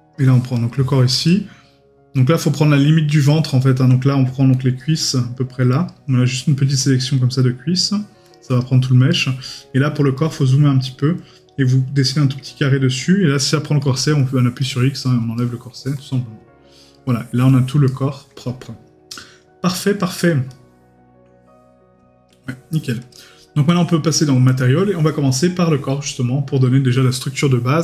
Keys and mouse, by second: 0.7 middle click, 3.3 middle click, 9.1 right click, 9.8 middle click, 10.3 right click, 15.4 right click, 16.9 right click.